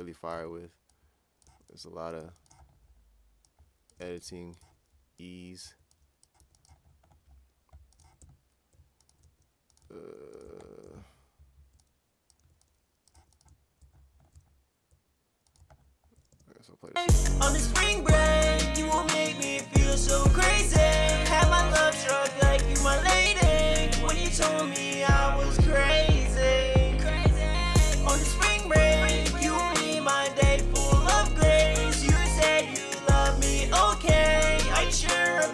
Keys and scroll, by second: 0.1-2.2 typing, 4.4-6.4 typing, 9.8 typing, 12.9-13.6 typing, 17.3-17.9 typing, 21.6-23.7 typing, 26.3-27.1 typing, 29.8 a, 34.2-35.2 typing.